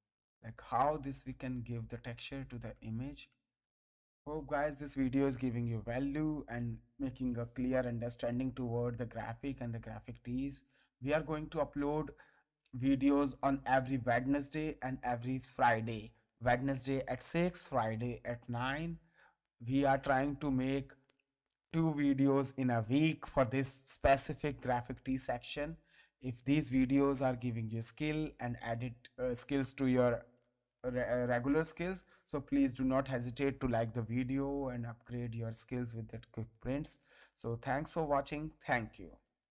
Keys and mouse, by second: 3.9 ctrl+space, 3.9 ctrl+click, 4.8 ctrl+click, 10.3 click, 11.7 ctrl+space, 15.9 space, 16.9 ctrl+click, 18.7 ctrl+space, 22.8 ctrl+space, 28.7 space, 37.2 space, 37.5 ctrl+click.